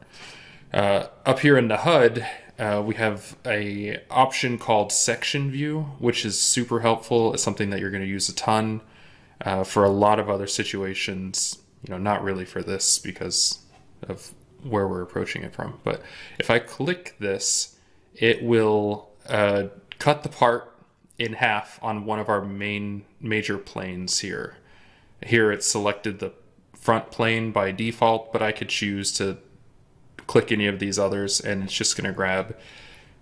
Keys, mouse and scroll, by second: 31.7 double click.